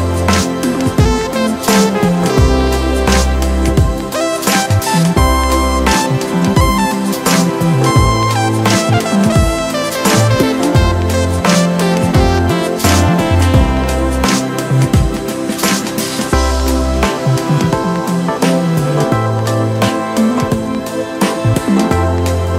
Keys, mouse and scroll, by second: 0.1-2.2 middle drag, 2.2 scroll up 2, 2.4 Tab, 2.8-4.1 middle drag, 4.1 KP_1, 4.7-5.8 scroll up 1, 5.9 click, 6.2-7.8 middle drag, 7.8 click, 8.9-9.7 scroll down 1, 9.7 click, 10.3 click, 11.2-11.6 scroll down 2, 11.6 shift+middle click, 12.1-12.9 scroll up 2, 12.9 click, 14.0 click, 15.6 click, 15.7 click, 16.9 click, 18.3 KP_1, 19.3 shift+middle click, 19.9 Tab, 21.0-22.2 scroll down 3.